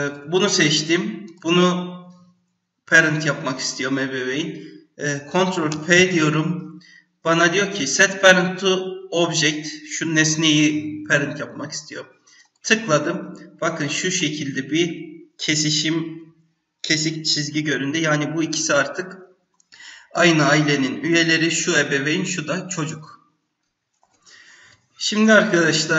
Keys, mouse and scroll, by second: 0.0 click, 1.2 shift+click, 5.7 ctrl+p, 13.6-14.1 scroll up 1, 14.1-15.7 scroll down 1.